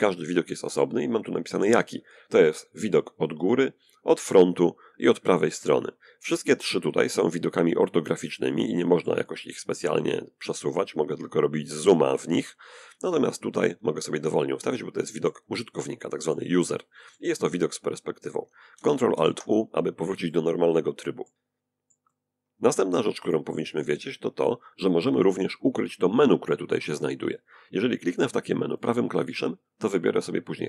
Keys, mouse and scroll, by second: 7.3-8.7 middle drag, 8.7 scroll down 1, 9.0-9.5 scroll up 1, 9.9 scroll down 1, 10.0 scroll up 1, 10.1 scroll down 1, 10.3-10.7 scroll up 1, 10.9 scroll up 1, 11.0-11.5 scroll down 1, 11.8 scroll down 1, 11.9-16.3 middle drag, 17.9 ctrl+alt+q, 19.1-22.7 shift+middle drag, 27.6 right click.